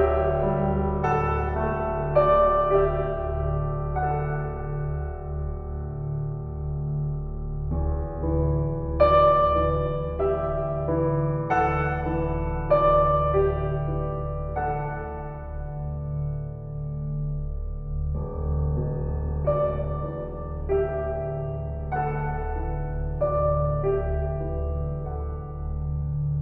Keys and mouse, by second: 0.0 Escape, 4.0 s, 5.6 drag, 7.0 ctrl+z, 8.2 s, 11.4 Escape, 13.3-15.4 ctrl+alt+drag, 17.0 ctrl+z, 17.2 ctrl+z, 17.5-26.4 ctrl+z.